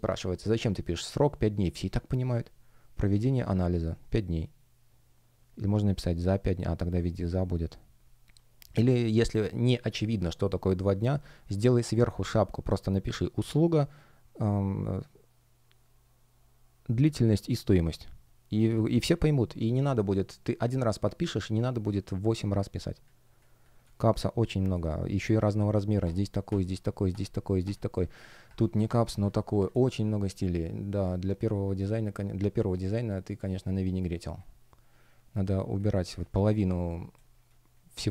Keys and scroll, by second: 11.3 F1, 22.3 space, 28.5 space, 37.1 space.